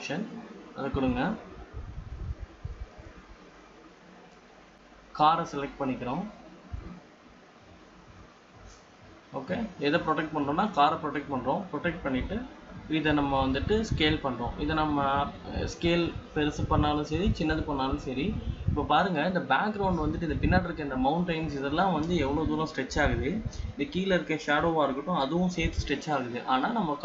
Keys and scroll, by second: 16.0 ctrl+-.